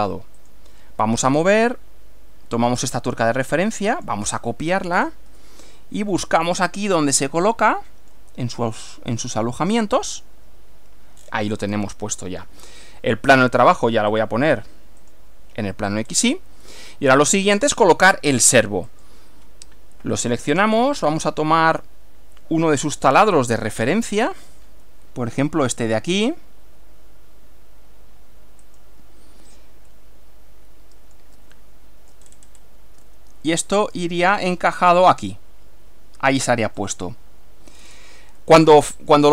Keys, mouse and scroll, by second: 0.4 click, 2.9 click, 4.0 click, 5.0-5.3 scroll down 1, 5.4-8.4 shift+middle drag, 10.2 click, 11.2-11.9 scroll down 3, 11.9 shift+middle click, 13.4 click, 14.2 click, 15.0 click, 16.1 scroll up 1, 16.8 middle click, 18.9 click, 20.6 click, 21.8-23.4 middle drag, 24.0 shift+middle click, 28.7 click, 30.0-31.4 middle drag, 31.6-32.2 shift+middle drag, 32.2-32.8 shift+scroll up 2, 33.2-34.2 shift+middle drag, 36.6 click, 37.8-38.2 scroll down 2, 38.5 middle click.